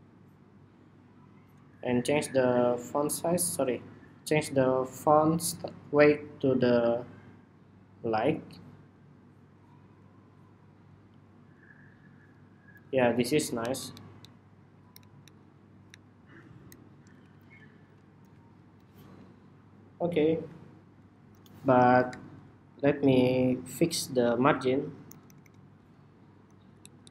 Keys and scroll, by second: 13.3 alt+Down, 13.5 alt+Down, 13.7 alt+Down, 14.0 alt+Down, 14.8 alt+Up, 15.0 alt+Up, 15.6 alt+Up, 16.4 alt+Up, 16.9 alt+Left, 17.0 alt+Left, 17.2 alt+Left, 17.6 alt+Left, 18.2 alt+Left, 24.8 alt+Right, 25.0 alt+Right, 25.2 alt+Right, 26.6 alt+Down, 26.8 alt+Down, 26.9 alt+Down.